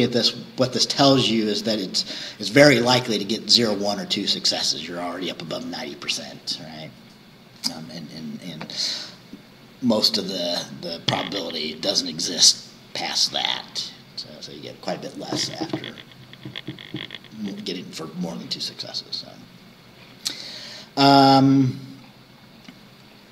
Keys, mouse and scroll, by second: 19.2-19.6 scroll down 2, 20.5-20.8 scroll down 2, 21.2 scroll down 2, 22.0-22.9 scroll down 4, 23.2-23.3 scroll up 2.